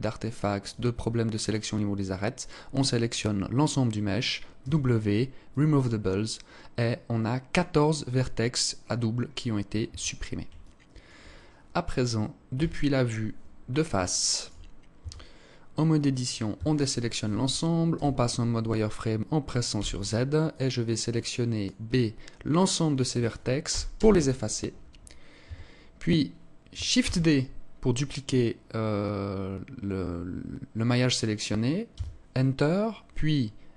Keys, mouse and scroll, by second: 0.5 scroll up 1, 4.0 w, 9.3 Tab, 10.0 alt+click, 12.0 KP_1, 13.5 alt+shift+click, 14.4 Tab, 15.9 a, 17.3 z, 19.1 b, 23.1 Delete, 24.9 Tab, 26.4 shift+d, 33.3 s.